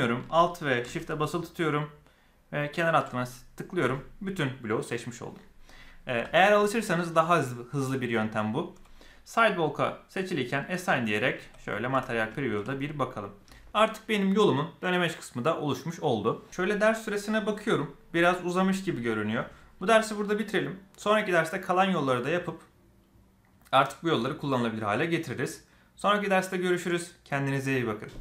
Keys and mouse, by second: 2.5 alt+shift+click, 3.2-4.7 middle drag, 10.4 click, 10.8-11.1 middle drag, 11.3 z, 11.8 Tab, 12.2 shift+middle drag, 12.6-13.3 middle drag.